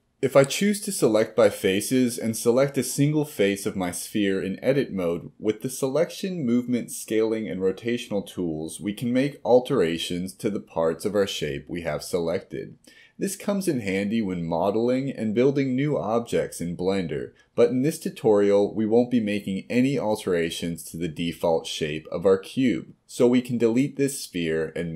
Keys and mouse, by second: 2.0 click, 2.4 click, 3.4 click, 5.8 s, 8.4 g, 11.4 r, 14.7 r, 16.2 click, 16.3 r, 20.8 click, 24.5 Delete.